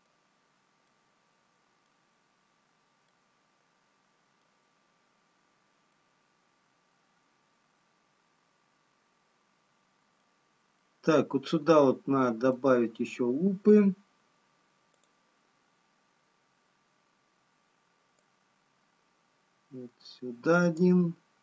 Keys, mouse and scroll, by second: 1.6 middle click, 1.6-3.4 scroll up 2, 3.4 middle click, 3.4 scroll down 4, 5.4 scroll up 1, 7.4 middle click, 15.4 click, 21.3 click.